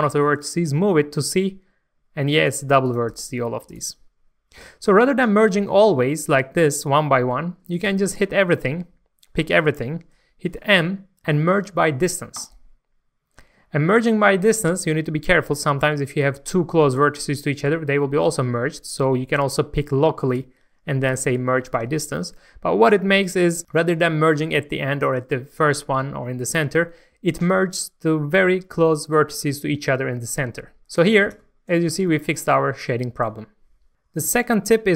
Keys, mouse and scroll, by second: 0.7 g, 2.3 right click, 2.8 click, 3.1 g, 3.7 right click, 4.7-6.0 scroll down 1, 7.9 a, 10.8 m, 12.4 click, 22.9 scroll up 1, 23.6 scroll down 1, 31.2 alt+a, 31.4 Tab, 31.7-32.1 scroll down 1, 32.1-33.9 middle drag, 33.9 click.